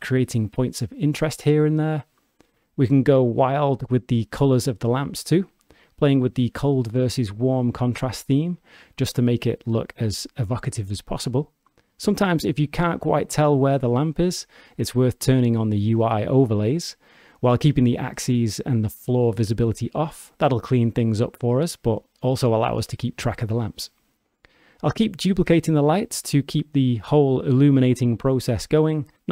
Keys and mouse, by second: 1.5 g, 3.6 click, 5.1 click, 12.0 g, 16.3 click, 19.0-21.5 drag, 22.1 g, 22.1 g, 22.6 click, 24.8 click, 26.2 shift+d.